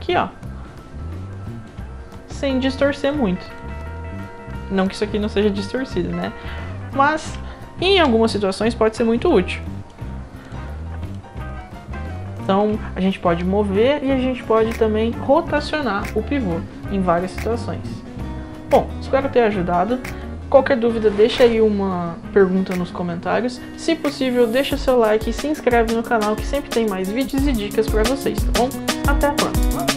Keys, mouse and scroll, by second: 2.1-2.5 right drag, 2.5 click, 3.0 click, 3.3 scroll down 2, 3.6-5.2 alt+drag, 5.6 click, 5.9 scroll up 1, 6.2-7.2 alt+drag, 7.9 d, 8.3-9.9 right drag, 10.4 click, 10.7 scroll up 1, 11.1-12.4 alt+drag, 11.6-12.4 alt+right drag.